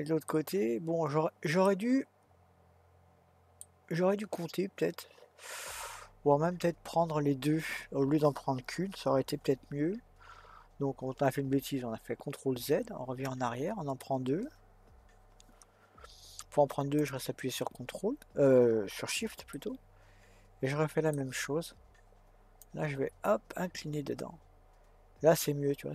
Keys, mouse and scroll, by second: 12.6 ctrl+z, 17.0 shift+click, 19.5-22.5 middle drag, 22.6 click.